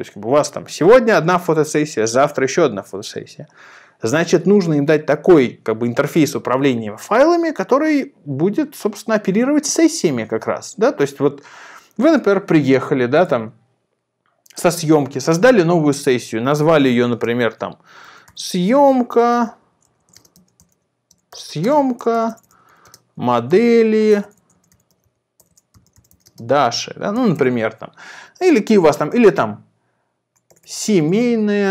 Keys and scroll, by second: 17.8-27.6 typing, 29.0-31.7 typing.